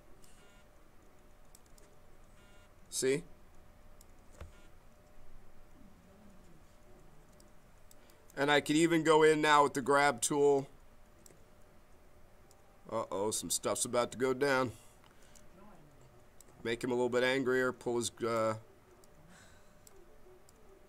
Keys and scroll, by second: 10.4 b, 14.3 ctrl+z, 15.2 b.